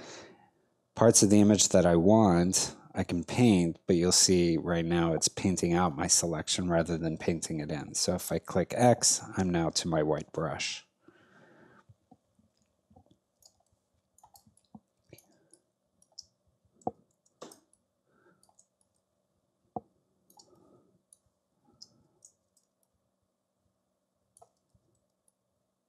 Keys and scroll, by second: 7.8 x, 13.4 space, 17.1 x, 17.7 ctrl+alt+x, 20.4 space, 25.0 ctrl+alt+x, 25.5 x.